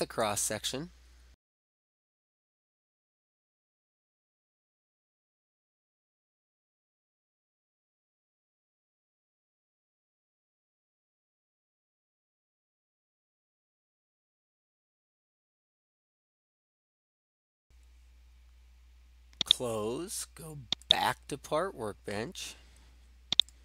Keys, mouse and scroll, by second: 1.7 click, 2.0 click, 2.4 click, 2.7 click, 3.0 click, 3.4 right click, 3.5 right click, 3.6 click, 3.9 click, 4.1 click, 4.4 click, 4.6 click, 4.9 click, 5.5-6.2 drag, 6.7 click, 7.0 click, 7.2 right click, 7.6 click, 8.5 click, 9.0 click, 9.5 click, 9.8 typing, 10.0 Return, 10.1 right click, 10.4 click, 10.9 click, 11.0 click, 11.2 click, 11.8 4, 12.2 right click, 12.8 click, 13.3 9, 14.1 right click, 14.4 click, 15.1 Return, 15.1 8, 15.7 click, 16.1 click, 19.5-20.5 drag, 21.1 click, 21.9 click, 23.5-23.6 drag.